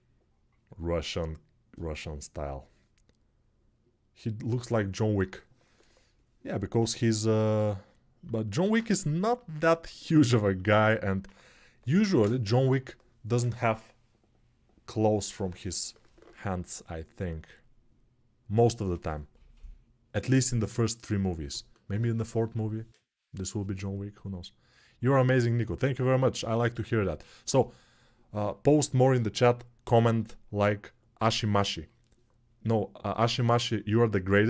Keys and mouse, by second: 8.4 ctrl+space.